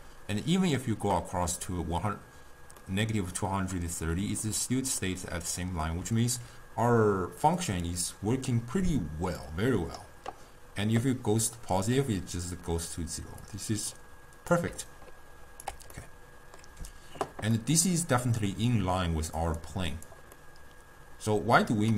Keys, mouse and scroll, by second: 2.8-6.1 middle drag, 6.1 d, 7.6 click, 8.4 d, 9.5-12.5 drag, 13.5-14.8 drag, 14.8 d, 15.0 right click, 15.9 d, 16.0-17.4 middle drag, 17.4 scroll down 1, 17.6-19.5 middle drag, 19.5 click, 20.0 click, 20.4-21.9 middle drag.